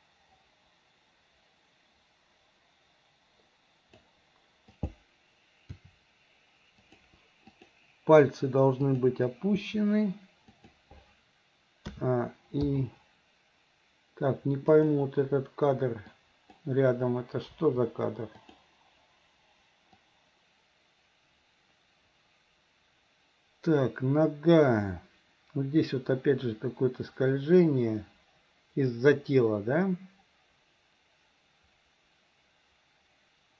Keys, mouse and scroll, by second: 4.7 click, 5.7 r, 7.5 click, 8.9 click, 9.6 r, 12.0 a, 12.7 i, 14.8 click, 16.2-16.7 drag, 17.6 Delete, 18.5 click, 20.1-33.5 drag.